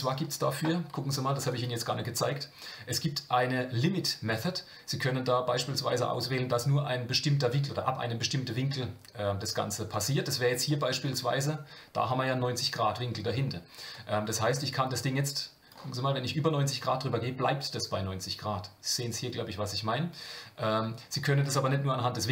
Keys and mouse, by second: 1.6-10.0 drag, 10.7 middle click, 13.9-15.8 drag, 21.4-22.3 drag.